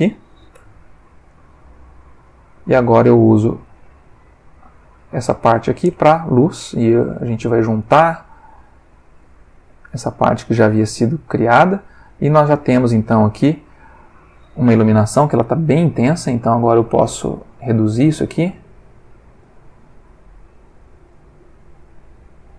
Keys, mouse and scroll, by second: 0.5 shift+d, 1.3 click, 2.0-2.8 drag, 3.6-4.8 drag, 6.9 click, 7.8-8.7 drag, 9.0-10.1 drag, 10.4-11.8 drag, 12.8 middle click, 13.4-14.4 middle drag, 15.4-16.2 drag, 16.5-17.2 drag, 17.4-17.9 drag, 18.2-19.2 drag, 19.4-20.1 drag, 21.1 click.